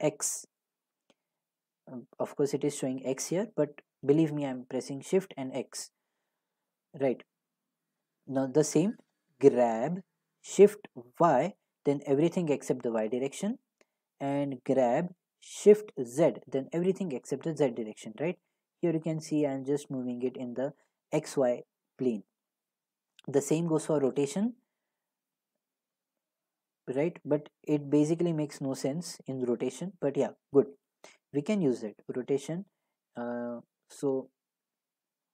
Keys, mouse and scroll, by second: 7.0-13.5 drag, 9.0 g, 11.1 y, 13.5 right click, 14.7 g, 16.2 z, 22.4 right drag, 24.0 r, 25.8 x, 30.9 right click, 32.0 r, 33.7 y.